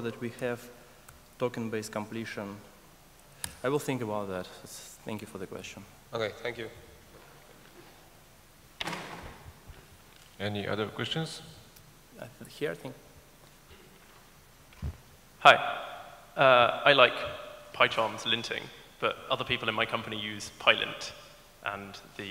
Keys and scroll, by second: 3.5 alt+BackSpace.